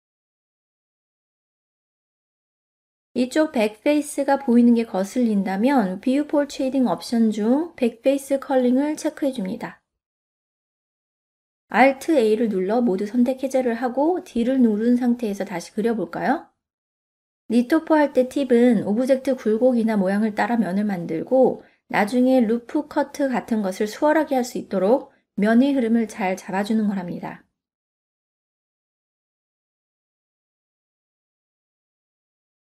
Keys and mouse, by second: 2.3 ctrl+middle click, 3.2 middle click, 5.7-8.1 drag, 8.4-11.2 middle drag, 12.7 alt+a, 14.4 middle click, 15.2-20.5 d, 15.9-18.7 drag, 19.2 click, 20.0 click, 21.2 click, 22.3 middle click, 23.6-25.5 drag, 26.5 middle click, 26.9 click, 27.7 e, 28.6 click, 29.1 ctrl+z, 29.2 click, 30.0 e, 30.9 click, 31.2 middle click, 31.9-32.6 middle drag.